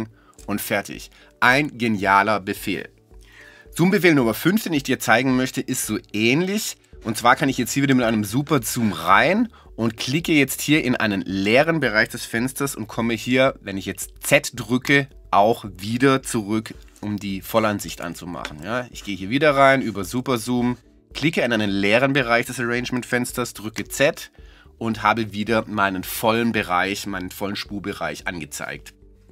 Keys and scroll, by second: 14.9 z, 23.8 z.